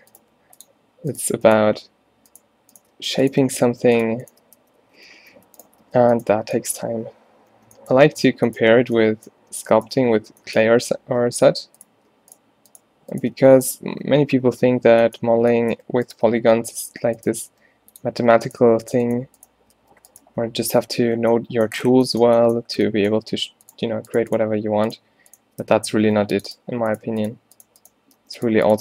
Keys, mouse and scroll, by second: 0.3 g, 3.0 f, 4.7 f, 5.3 ctrl+z, 5.9 f, 7.7 z, 8.9 b, 9.5 z, 10.0 f, 13.4 f, 14.2 ctrl+z, 15.0-17.4 typing, 19.2 shift+right click, 19.8 g, 20.3 f, 21.1 a, 24.8 click, 25.8 f, 26.1 ctrl+r, 28.3 f.